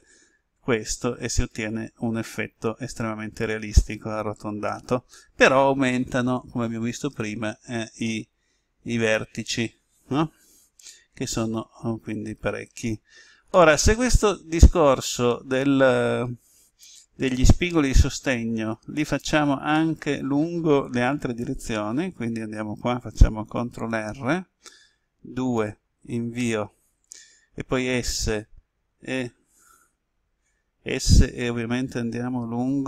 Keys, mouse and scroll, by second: 24.0 ctrl+r, 25.5 2, 26.4 Return, 27.7 s.